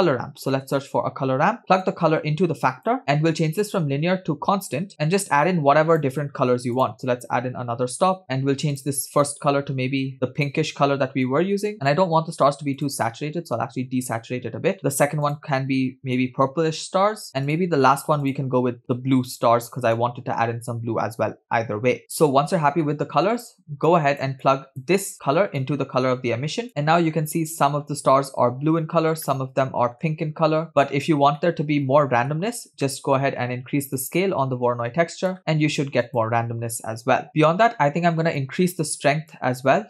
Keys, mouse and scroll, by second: 2.0 click, 3.5-4.9 drag, 5.3-6.3 drag, 7.0 click, 8.2 click, 9.0 click, 9.4 click, 11.9 drag, 13.0 drag, 14.9 click, 15.5 drag, 17.5-17.9 drag, 18.5 drag, 22.8-23.1 scroll down 2, 23.9-24.3 drag, 24.4-24.8 drag, 25.7-26.7 drag, 27.2-27.9 scroll up 2, 28.0-28.6 scroll down 2, 29.6-30.5 middle drag, 31.7-32.7 middle drag, 33.2-33.6 middle drag, 34.3-35.4 drag, 36.3 click, 37.3 0, 37.3 middle click, 38.5-39.7 drag.